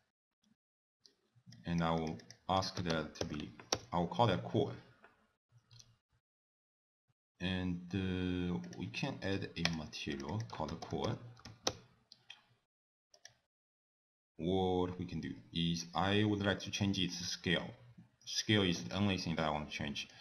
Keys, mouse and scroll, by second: 1.6 click, 2.0 click, 2.2 click, 8.6 click, 9.7 click, 10.1 click, 10.3 click, 13.2 click, 14.9-15.4 scroll down 1, 15.4-15.9 scroll up 1, 18.9 middle click, 19.4-19.9 scroll up 2, 19.7 middle click.